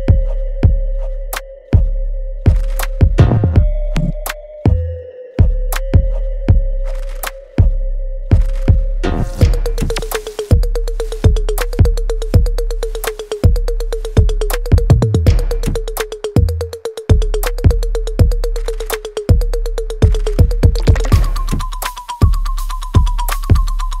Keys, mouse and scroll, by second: 2.3 click, 7.4-8.4 typing, 9.1 Return, 9.5-10.2 scroll up 1, 11.1 middle click, 12.3 scroll down 1, 12.7-13.6 scroll up 1, 13.6-14.1 scroll down 1, 15.1 click, 16.8 right click, 18.1 click, 21.3 scroll down 1, 23.0 middle click, 23.7 scroll down 1.